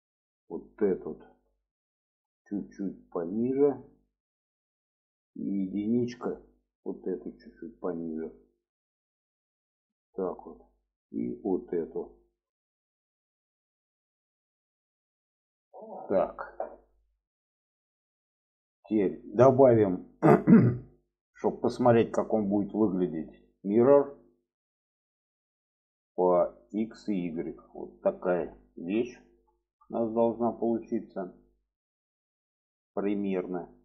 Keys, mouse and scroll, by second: 0.2 click, 0.9 alt+middle click, 2.6-3.8 drag, 4.6 middle click, 6.0 1, 7.0 alt+middle click, 8.3-10.5 drag, 10.7 middle click, 11.9 click, 12.2 alt+middle click, 13.5-14.5 drag, 14.9 click, 15.8 shift+middle click, 17.1 middle click, 22.9-24.3 drag, 27.0 click, 27.6 middle click, 28.6 shift+middle click, 29.5 shift+middle click, 30.4 shift+middle click, 32.8-33.8 middle drag.